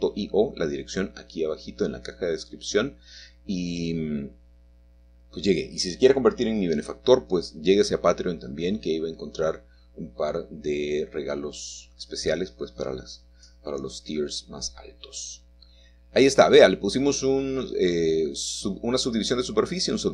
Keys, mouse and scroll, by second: 0.4-1.5 drag, 2.0 middle click, 2.2 Tab, 12.9 g, 15.0-16.0 shift+drag, 17.8-20.1 middle drag.